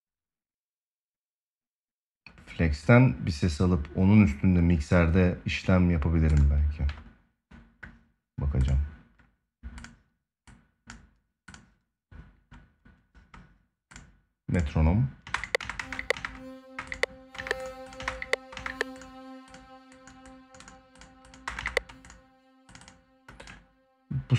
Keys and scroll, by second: 14.9 space, 21.1 space.